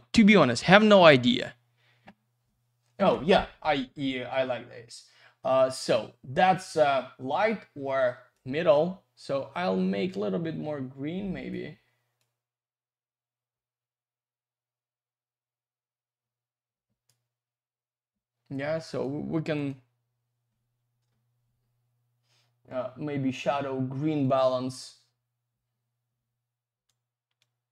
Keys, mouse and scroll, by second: 8.3 click, 12.2 click, 18.9 click, 19.0 click, 19.5 click, 19.7 click, 24.2 click, 27.4 click.